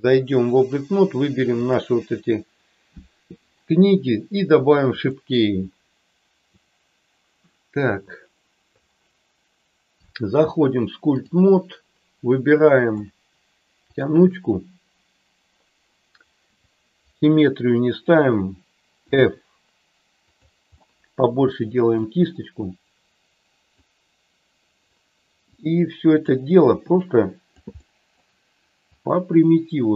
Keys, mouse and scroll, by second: 5.0 click, 7.8 click, 10.1-11.3 drag, 19.0 f, 20.8-21.9 middle drag, 23.7-24.8 drag, 25.6 click, 27.0 click, 27.7 middle click, 28.8-29.9 drag.